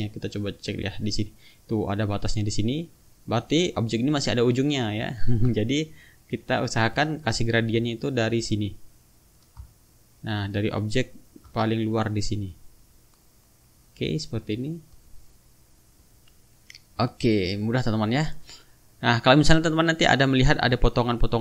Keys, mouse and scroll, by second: 0.5-1.1 drag, 2.0-2.6 drag, 5.2 ctrl+z, 6.8 click, 8.3 click, 9.4-11.4 ctrl+drag, 13.1 shift+-, 14.7-15.2 drag, 16.1 click, 17.2 shift+-, 18.1 click, 19.7 click, 20.1 click.